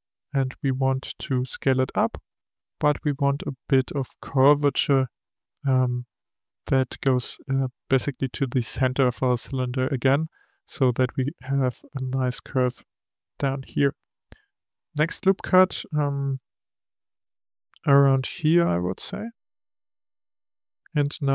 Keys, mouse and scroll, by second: 0.8 s, 16.6-19.8 drag.